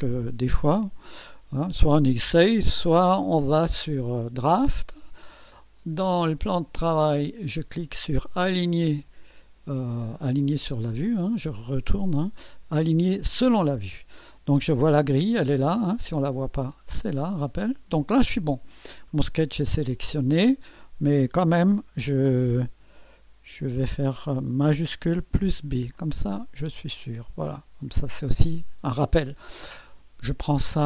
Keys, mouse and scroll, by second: 6.9 click, 8.5 click, 11.6 click, 13.4 click, 16.6 click, 17.1 click, 25.3 shift+b, 25.9-27.7 shift+drag.